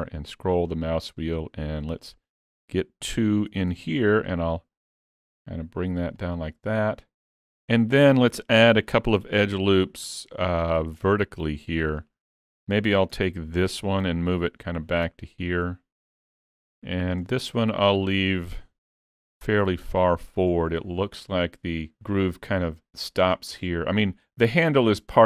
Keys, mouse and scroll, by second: 3.5 s, 9.2 ctrl+r, 13.7 alt+click, 14.7 click, 18.9 alt+click, 19.9 click.